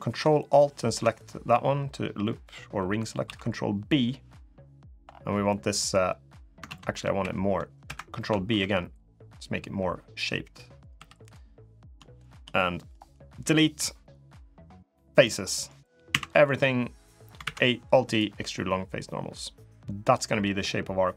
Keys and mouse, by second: 0.9 click, 3.0 ctrl+b, 5.3 middle click, 6.4 ctrl+z, 6.9 ctrl+v, 8.3 ctrl+b, 10.7 3, 11.0 click, 11.4 middle click, 12.0 shift+click, 12.3 middle click, 13.2 Delete, 15.2 middle click, 15.9 a, 17.2 alt+e, 20.6 middle click.